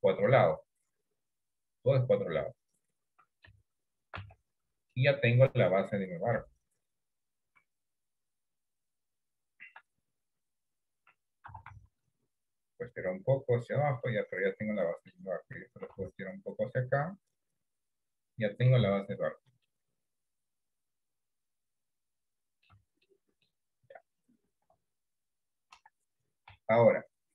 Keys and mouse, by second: 0.7-3.5 middle drag, 4.2 Tab, 5.3 middle click, 6.4 KP_1, 7.5 KP_3, 11.6 s, 14.2-15.2 middle drag, 15.9 s, 18.5 middle click, 19.1 Tab, 19.9-22.8 middle drag, 22.9 Tab, 23.2 middle click, 24.8 KP_1, 25.9 KP_3, 27.0 shift+middle click.